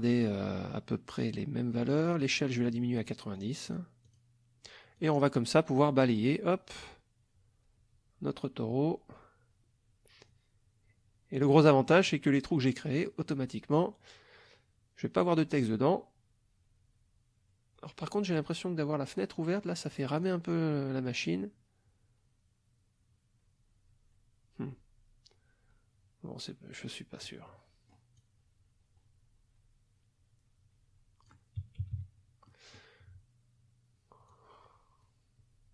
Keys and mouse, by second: 1.8 click, 3.4 click, 4.0 click, 5.0-11.7 drag, 11.7 middle click, 12.3-18.6 drag, 20.2 click, 20.7 middle click, 21.3-27.4 drag, 27.5 middle click, 28.2-31.4 drag, 31.8 KP_Subtract, 32.5 middle click, 34.3-35.7 drag.